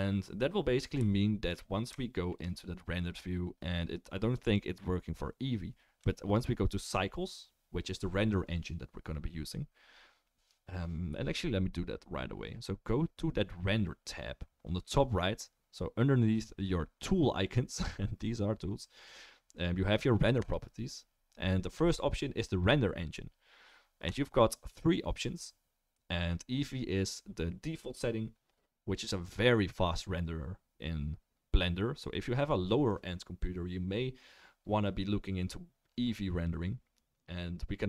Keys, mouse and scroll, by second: 4.4 click, 20.5 click, 24.1-37.8 drag.